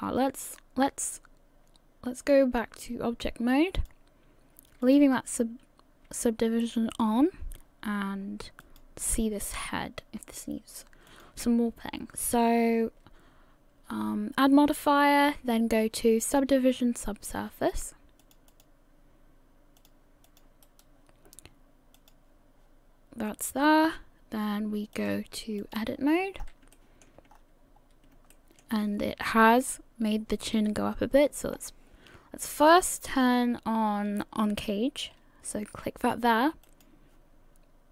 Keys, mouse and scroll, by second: 2.2 click, 4.8 click, 8.6 click, 11.1 click, 20.3 click, 20.7 right click, 22.0 click, 25.0 click, 26.4 scroll up 4, 26.8 shift+middle click, 27.3-28.0 scroll up 4, 28.3 shift+middle click, 31.5-32.3 scroll up 3, 36.7 click.